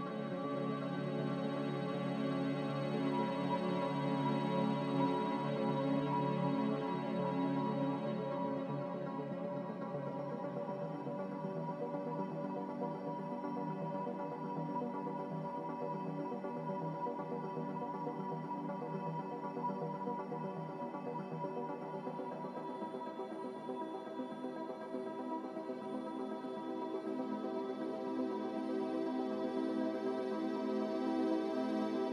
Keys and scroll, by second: 0.0-1.3 typing, 3.5-4.4 typing, 8.6 ctrl+z, 13.6 ctrl+z, 13.9 q, 14.7 ctrl+z.